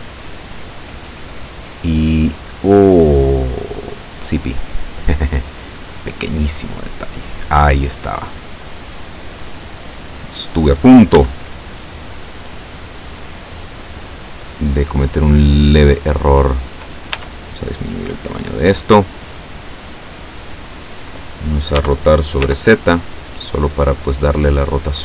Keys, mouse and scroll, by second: 1.2-2.5 drag, 3.4 click, 4.7 click, 5.7 click, 6.8-9.9 drag, 10.1-10.5 scroll up 1, 10.8 scroll up 1, 11.0-13.6 middle drag, 11.2 s, 14.5 click, 15.3-16.6 drag, 17.2 s, 18.2 click, 19.3-20.8 drag, 21.8 r, 22.5 z, 24.1 click.